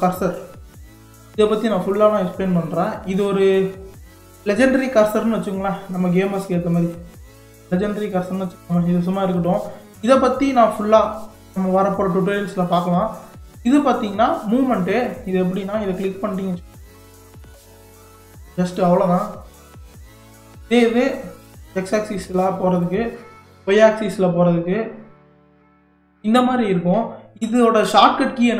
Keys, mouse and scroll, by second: 0.0-3.0 drag, 3.2 scroll down 1, 4.5-6.9 drag, 7.9-9.5 drag, 10.8-12.8 drag, 13.7-15.3 drag, 16.9 click, 21.1 drag, 24.0 click, 27.0-27.6 scroll down 1, 27.6-28.5 middle drag.